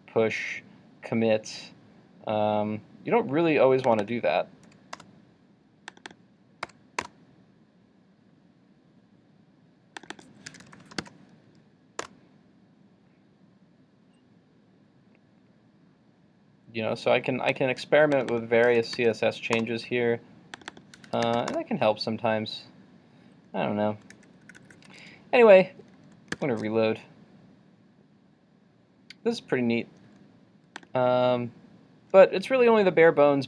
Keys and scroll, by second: 24.2 super+z, 24.5 super+z, 26.5 super+r.